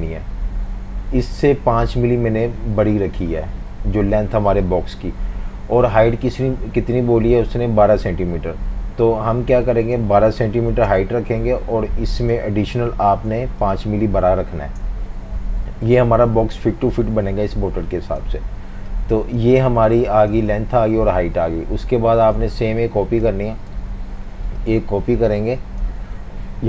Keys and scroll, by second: 10.2-11.1 typing, 13.4-14.6 typing, 14.6 Return, 22.0 typing, 23.8 v.